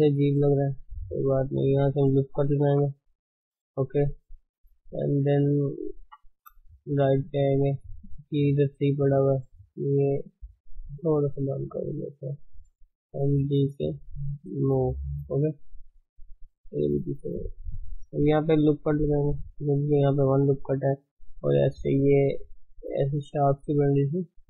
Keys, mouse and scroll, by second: 0.3-2.6 middle drag, 2.6 ctrl+r, 4.4-5.1 middle drag, 6.0 KP_3, 7.0 shift+z, 7.1 scroll up 2, 7.4-9.7 shift+middle drag, 9.7 click, 10.6 click, 11.6 g, 12.4 click, 12.6 g, 16.6 click, 16.9 g, 19.0 ctrl+r, 19.7-22.4 scroll up 1, 22.4-23.6 drag, 23.6 d, 23.7-24.4 right drag.